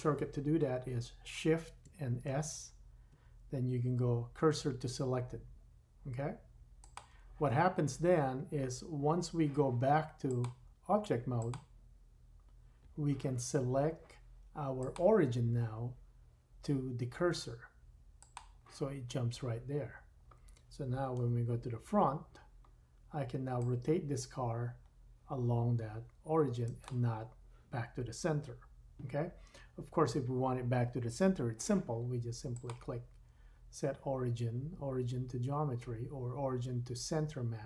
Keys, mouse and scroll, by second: 2.2 shift+s, 5.3-10.3 drag, 14.7 click, 18.7-26.8 drag, 21.2 KP_1, 26.8-32.5 middle drag, 32.5-37.6 drag.